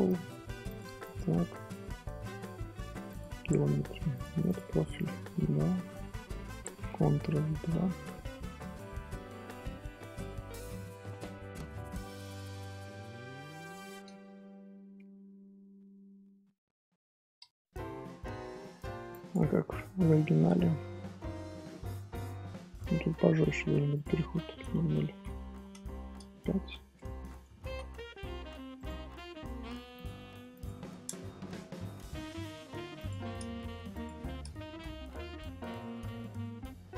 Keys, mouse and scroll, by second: 1.0-6.1 drag, 6.1-7.5 middle drag, 7.5 ctrl+2, 8.3-11.3 middle drag, 11.6 scroll up 1, 11.6 scroll down 1, 11.8 scroll up 1, 12.0 shift+middle drag, 12.2-12.5 scroll down 1, 12.5-12.8 scroll up 1, 12.8-14.7 shift+middle drag, 14.7 scroll up 2, 14.9 Tab, 15.7 Tab, 16.2 scroll down 1, 16.4-16.9 middle drag, 16.9-19.9 scroll up 1, 20.9-21.3 scroll up 1, 21.3-23.9 middle drag, 23.9-25.5 drag, 25.5 BackSpace, 26.9 scroll down 1, 26.9-28.7 middle drag, 28.7-29.9 right drag, 29.9 click, 30.5-31.7 drag, 31.7-32.9 middle drag, 32.9-34.8 drag, 34.8 scroll down 1, 35.0-36.1 middle drag, 36.1-36.4 scroll down 1, 36.4 scroll up 2.